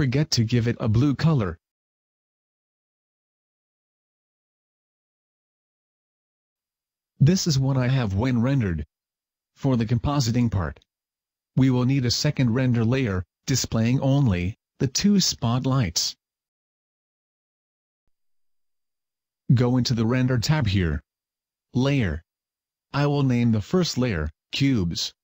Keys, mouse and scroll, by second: 1.0 click, 2.2 click, 16.2 Escape, 19.6 click, 20.8 click, 22.4 click, 24.7 click.